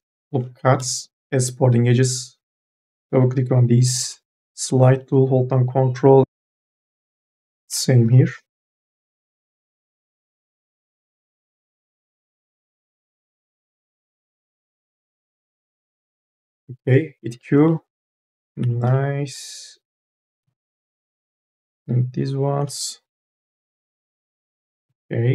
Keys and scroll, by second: 0.5 2, 0.9 e, 2.4 2, 4.2 m, 4.7 o, 8.7 m, 10.3-12.0 typing, 13.8 1, 16.7-19.2 typing, 22.6 q.